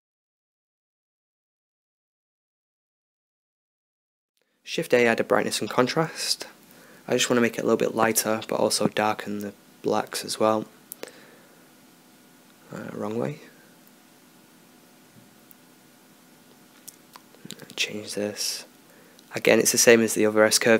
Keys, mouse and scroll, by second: 4.9-5.8 drag, 5.8-7.0 middle drag, 17.9-19.5 middle drag.